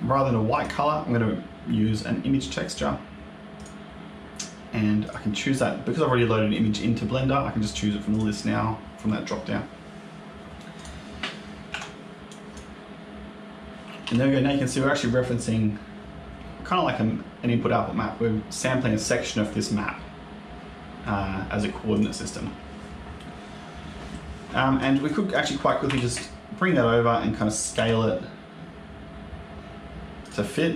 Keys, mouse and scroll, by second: 0.4 click, 4.9 click, 10.6 click, 11.6 Tab, 12.2 click, 13.9 g, 24.9 click, 25.7 g, 27.6 s.